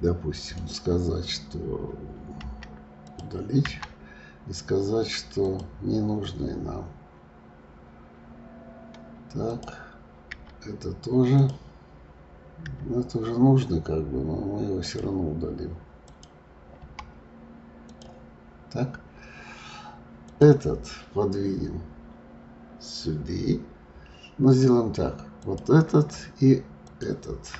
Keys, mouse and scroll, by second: 0.6 right click, 9.4 click, 10.3 Delete, 16.0 click, 16.8 Delete, 20.2 click, 25.3 click, 26.8 shift+click.